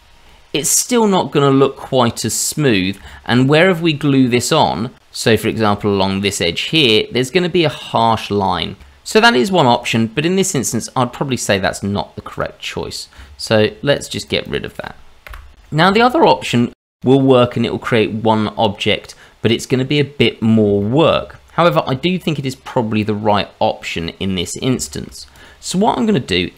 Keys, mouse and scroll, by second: 0.6 middle click, 2.8 scroll up 1, 3.0 shift+middle click, 3.5-4.0 scroll up 2, 4.0 middle click, 5.5 click, 6.3 click, 8.8 ctrl+z, 10.4 click, 12.3 click, 12.3 middle click, 13.2 Tab, 13.9 click, 14.4 click, 15.3 Delete, 15.5 scroll down 1, 15.9 shift+middle click, 16.7-17.2 scroll up 2, 17.2 middle click, 20.4 scroll up 2, 20.8 shift+middle click, 21.3-21.9 scroll up 2, 21.9 middle click, 23.2 middle click, 24.4-24.7 scroll down 1, 24.8 shift+middle click, 25.3 click.